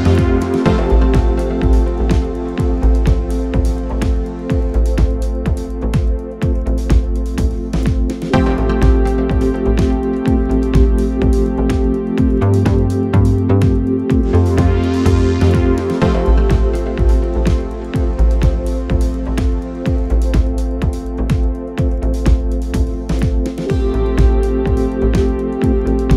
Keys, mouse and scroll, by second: 0.2-1.0 drag, 1.0-2.6 scroll up 2, 2.6-4.4 scroll up 1, 4.4-6.0 scroll up 1, 6.0-6.6 scroll up 1, 6.6-8.4 scroll up 1, 8.4-10.1 scroll up 1, 10.1-11.1 scroll up 1, 11.1-13.3 scroll up 1, 13.3-14.7 scroll up 1, 14.7-16.2 scroll up 1, 16.2-19.3 scroll up 1, 19.3-20.3 scroll up 1, 20.3-22.4 scroll up 1, 22.4-24.8 scroll up 1, 24.8-25.4 scroll up 1, 25.4-26.1 scroll up 1.